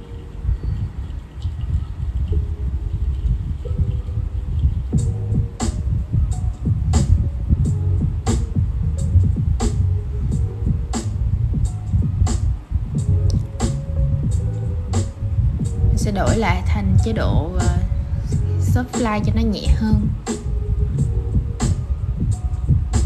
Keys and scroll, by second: 0.4 super+z.